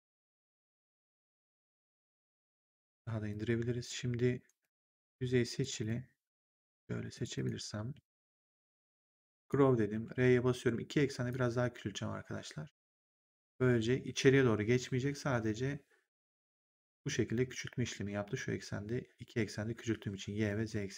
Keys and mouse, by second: 3.2 click, 4.3 right click, 4.8 click, 5.5 shift+click, 7.1 shift+click, 9.3 click, 9.8 r, 11.2 click.